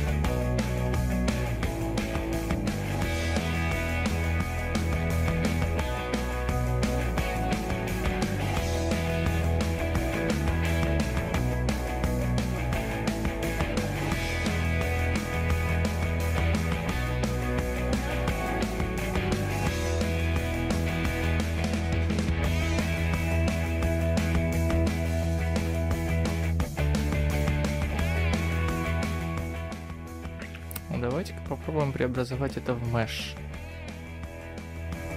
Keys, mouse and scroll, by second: 1.2 click, 1.2-1.9 scroll up 1, 1.9 right click, 14.0 Tab, 14.0 middle click, 16.2 click, 29.9 middle click.